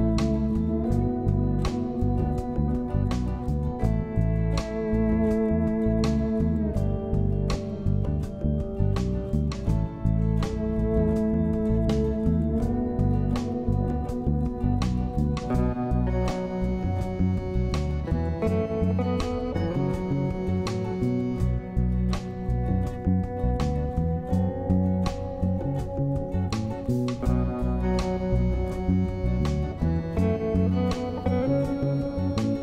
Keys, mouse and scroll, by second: 4.6 F2, 10.3 F2, 21.8 m.